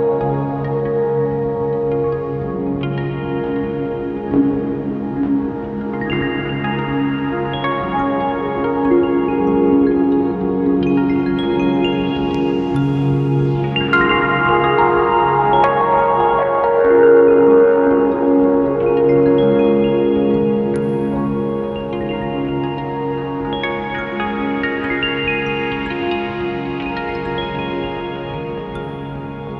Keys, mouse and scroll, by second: 0.8 click, 6.2 KP_0, 6.5 click, 9.2 scroll down 1, 9.6 alt+a, 9.7 `, 27.4 click, 29.4 scroll up 1.